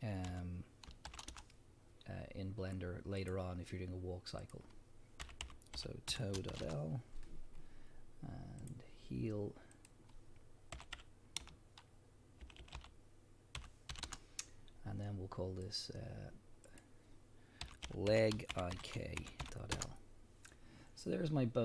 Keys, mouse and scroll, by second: 1.4 Return, 4.4-8.7 drag, 6.7 Return, 9.7-15.8 drag, 12.6 e, 14.1 Return, 16.7-21.6 drag, 19.8 Return.